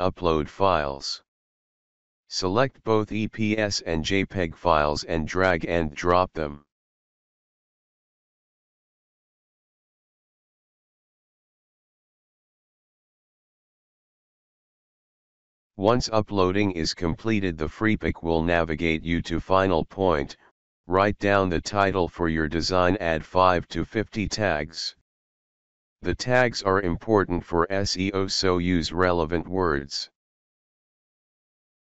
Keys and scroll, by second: 0.0-0.6 typing, 22.9 ctrl+a, 23.5 ctrl+shift+p, 23.7 ctrl+shift+BackSpace, 24.1-29.4 typing.